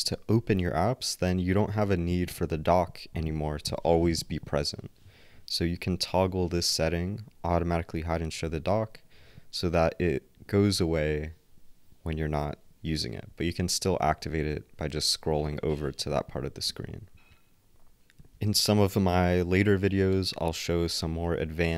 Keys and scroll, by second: 18.2 ctrl+alt+w.